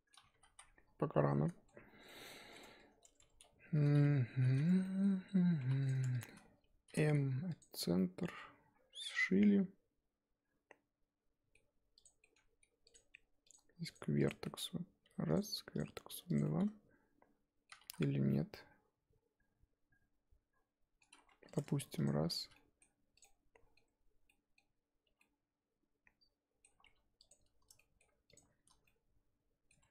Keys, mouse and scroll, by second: 0.3 ctrl+z, 0.5 ctrl+z, 1.1-2.6 middle drag, 2.6 Tab, 3.2 Tab, 4.3 shift+h, 4.7 Tab, 4.8 middle click, 5.1-5.6 scroll up 2, 5.6 1, 5.8 click, 7.6 m, 7.9-12.0 middle drag, 12.0 click, 12.2-14.2 middle drag, 14.2 click, 14.4 middle click, 15.0 g, 15.8 click, 16.1 g, 16.5-17.8 middle drag, 17.8 ctrl+z, 18.3-21.3 middle drag, 21.3 2, 21.4 click, 22.4 f, 22.5 middle click, 23.2 click, 23.2-25.0 middle drag, 25.0 1, 25.2-26.8 middle drag, 26.8 2, 27.3 click, 27.7 middle click, 28.3 shift+click, 28.8-29.9 middle drag.